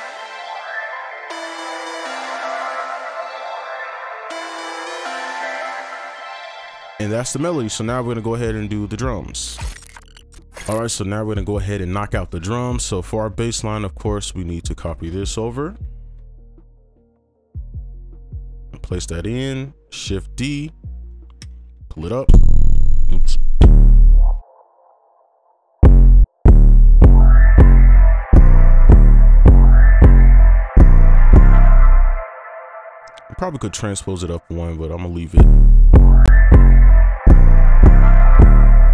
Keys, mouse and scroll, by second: 6.1 space, 13.5 ctrl+click, 15.7 ctrl+c, 17.7 right click, 19.7-20.5 typing, 20.8 scroll up 1, 21.5-21.9 alt+scroll up 1, 22.2 space, 23.0 ctrl+a, 23.6 ctrl+Up, 24.3 scroll up 1, 24.4 right click, 26.9 space, 28.7 space, 28.9 space, 31.7 space, 31.9 ctrl+a, 32.6 shift+click, 35.0 right click.